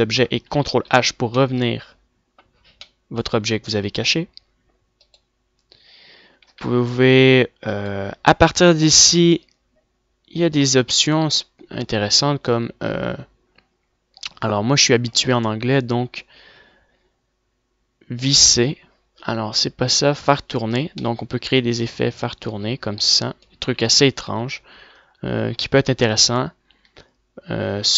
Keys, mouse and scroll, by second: 0.1 middle click, 1.2 alt+h, 3.8 a, 4.6 a, 6.5 click, 6.8 r, 8.2 click, 10.0 click, 11.1 click, 18.3-19.8 drag, 21.4 middle click, 23.8 ctrl+z, 24.1 ctrl+z.